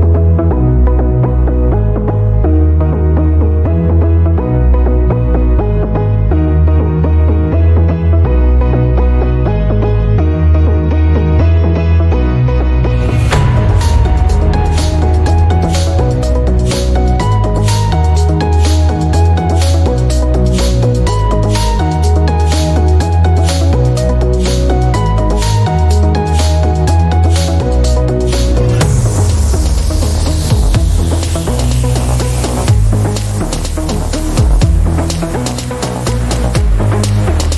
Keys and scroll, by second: 24.2 Escape, 34.9 Escape, 35.3 ctrl+alt+d.